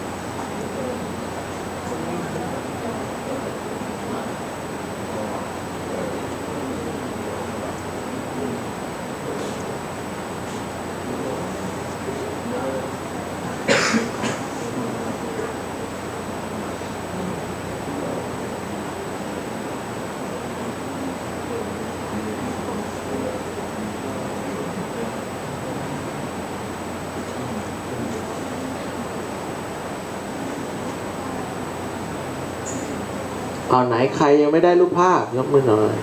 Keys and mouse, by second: 8.0-12.8 drag, 23.0-31.8 drag.